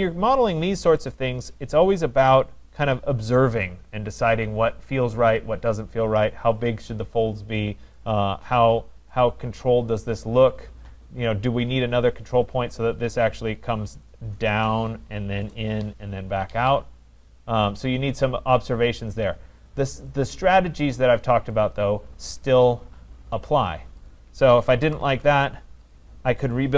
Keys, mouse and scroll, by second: 1.0 right click, 1.4 scroll, 2.5 right click, 2.8-4.4 scroll, 6.0 middle click, 9.2 right click, 11.8 click, 19.9 click, 20.1 click, 21.6 click, 22.5 click, 23.4 click, 24.2 click, 24.9 Delete, 25.9 click.